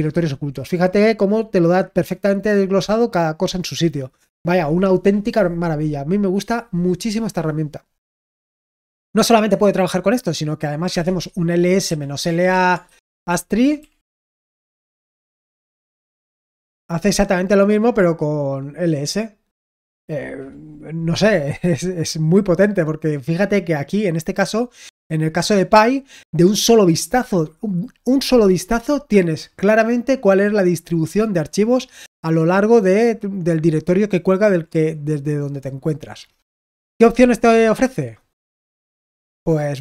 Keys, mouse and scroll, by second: 8.8-21.4 scroll down 2, 21.4-23.4 scroll down 2, 23.4-24.0 scroll up 2, 24.0 scroll down 2, 24.4-34.5 scroll up 2, 34.5-35.3 scroll down 2, 35.3-38.6 scroll down 1, 38.6 click, 39.6-39.8 scroll down 1.